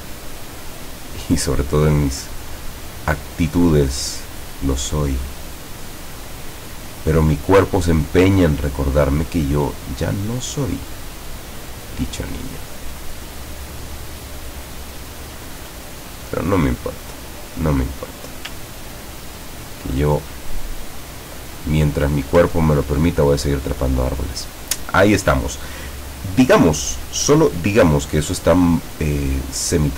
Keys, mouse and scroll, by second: 0.4-1.4 middle drag, 2.1 scroll up 1, 3.6-6.4 drag, 6.4-6.9 scroll down 1, 8.2 scroll down 1, 10.7-14.0 drag, 14.8-15.1 scroll up 1, 16.3 click, 17.5 scroll up 2, 17.8-18.3 scroll down 4, 18.6 ctrl+scroll down 2, 20.5-21.7 drag, 22.7 ctrl+scroll down 1, 23.2 ctrl+click, 29.4 click, 29.8 click.